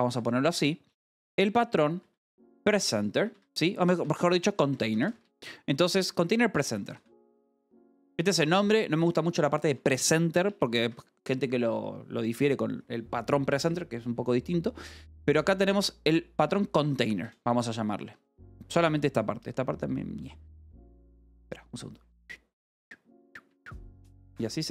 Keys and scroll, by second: 0.0-10.6 typing, 10.8 Escape, 15.8-17.7 typing, 17.9 Escape, 19.1 l, 20.1-23.9 typing, 23.4 Escape, 24.4 Return.